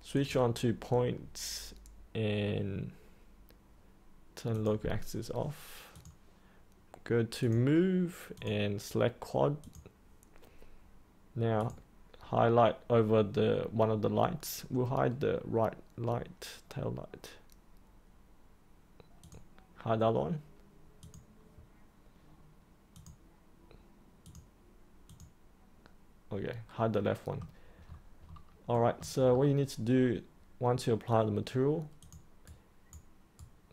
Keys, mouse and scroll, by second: 0.1 click, 4.4 click, 26.9 middle click, 27.8-28.3 scroll up 1, 28.7 middle click, 29.2-31.9 scroll up 1, 31.9 click, 32.4-33.7 right drag.